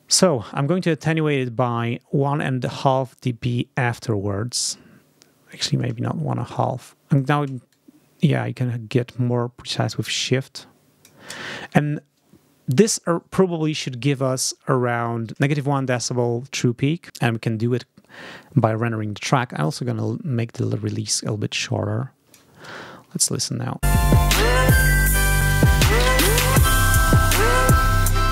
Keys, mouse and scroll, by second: 0.1-5.7 drag, 5.9 shift+click, 6.8-7.2 shift+scroll up 1, 7.6-11.1 shift+scroll up 1, 19.9-22.0 scroll up 1, 22.0-22.4 scroll up 1, 23.1 ctrl+scroll up 1, 23.7 space.